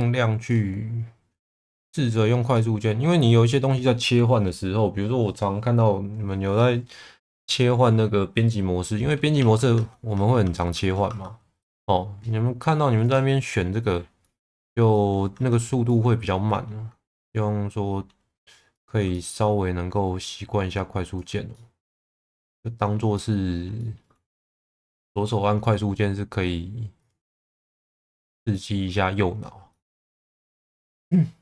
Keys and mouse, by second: 1.6 middle click, 2.5 middle click, 9.4 Tab, 9.7 Tab, 10.1 Tab, 10.4 Tab, 10.7 Tab, 11.1 Tab, 11.6 middle click, 13.2 click, 14.2 middle click, 14.5 Tab, 15.0 middle click, 15.3 Tab, 15.9 middle click, 17.1 middle click, 19.1 shift+middle click, 21.5 middle click, 22.3 shift+middle click, 23.1 middle click, 23.8 shift+middle click, 27.0 click, 27.3 middle click, 28.5 shift+middle click, 29.7 middle click, 30.3 2, 30.6 click, 30.9 alt+middle click.